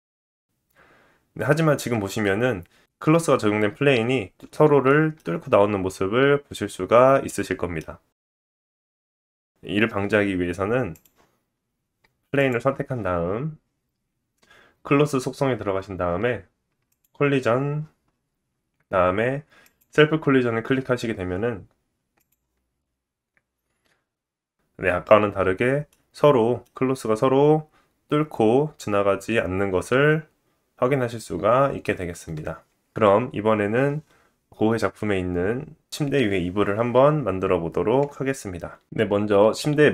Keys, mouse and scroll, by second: 1.7 space, 4.4 middle click, 5.1-5.6 scroll up 3, 5.5 shift+middle click, 6.1-7.4 scroll up 1, 8.0 middle click, 8.6-9.2 scroll down 2, 10.9 click, 11.5-12.0 scroll down 2, 12.4-17.8 drag, 15.4-16.1 scroll down 7, 17.5-19.2 scroll down 3, 19.2-19.7 scroll down 1, 19.7-22.1 drag, 22.1-24.0 scroll down 1, 24.0-24.6 scroll up 4, 24.4-38.6 middle drag, 31.4-33.3 scroll down 1, 37.7 space, 39.0 click.